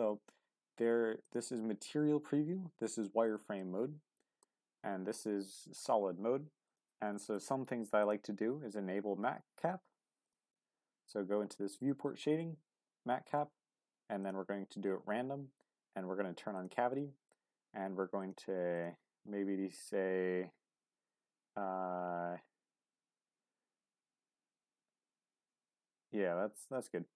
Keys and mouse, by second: 2.1-3.6 drag, 3.6-4.4 middle drag, 5.5 click, 6.6-27.1 drag.